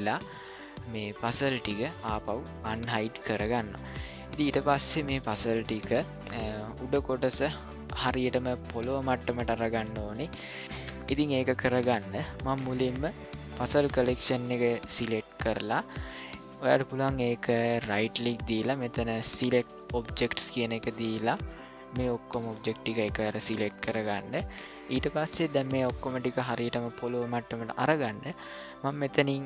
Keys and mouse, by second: 2.6 click, 3.5-4.2 middle drag, 4.6-5.0 ctrl+middle drag, 5.4 shift+middle click, 6.0 middle click, 7.1-7.4 shift+middle drag, 9.9 middle click, 10.6 ctrl+middle click, 11.0 middle click, 17.8-20.6 right drag.